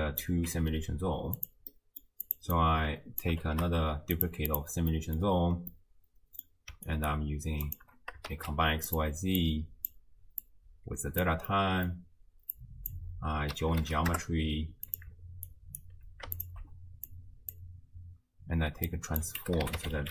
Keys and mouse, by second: 0.5 g, 1.7 click, 2.3 click, 2.6-3.3 drag, 3.4 ctrl+shift+d, 4.5 click, 4.9 click, 5.1 middle click, 5.7 click, 7.0 ctrl+click, 7.7 click, 8.3 shift+d, 9.4-9.9 drag, 10.4-11.2 drag, 11.5 middle click, 12.5-15.0 drag, 15.5-15.9 alt+drag, 16.4 alt+shift+click, 17.1 click, 17.3 click, 18.9-20.1 drag.